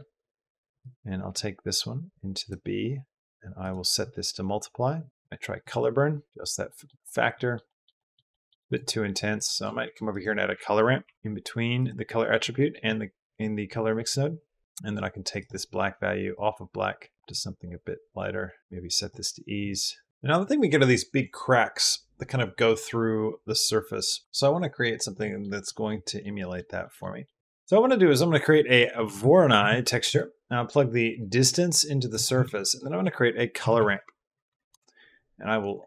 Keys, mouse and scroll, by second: 0.6 click, 0.7-2.9 drag, 3.4-5.1 drag, 5.1 middle click, 6.5 middle drag, 6.9 middle drag, 7.2 middle drag, 7.5 middle drag, 7.8 middle drag, 8.1 middle drag, 8.5 click, 9.0 click, 9.3 click, 9.6 shift+a, 12.4 middle click, 13.9 middle click, 18.6 click, 25.0 middle click, 25.5 middle click, 26.0 middle drag, 26.2 middle click, 26.6 middle drag, 27.0 middle click, 27.4 shift+x, 27.5 shift+a, 31.0-32.0 drag, 32.1 click, 32.2 shift+a.